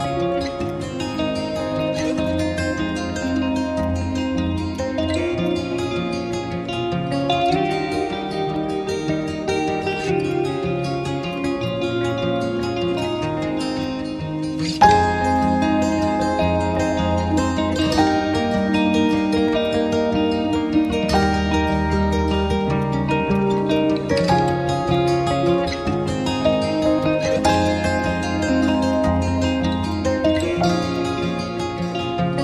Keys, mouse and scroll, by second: 0.0 alt+click, 1.1 alt+click, 3.2 alt+click, 4.7 alt+click, 5.4 shift+click, 5.8 alt+click, 25.5-25.9 alt+scroll up 2, 25.9 alt+middle click, 26.2 alt+middle click.